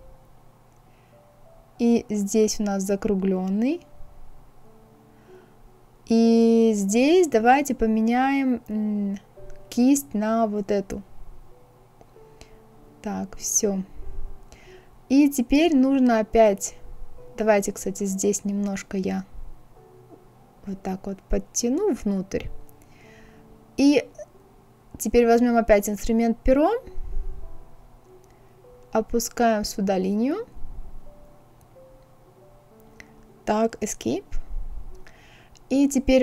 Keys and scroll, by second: 33.0 Escape.